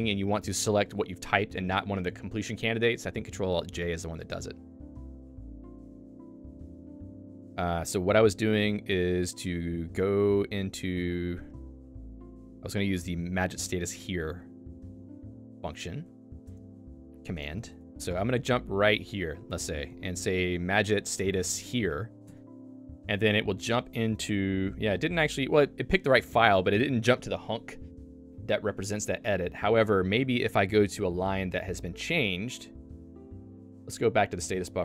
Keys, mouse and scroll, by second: 6.9 Return, 9.4 click, 11.2 click.